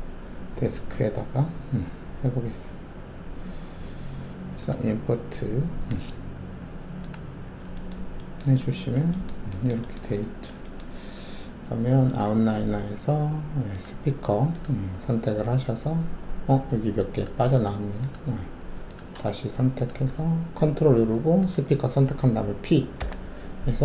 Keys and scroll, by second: 23.0 ctrl+p.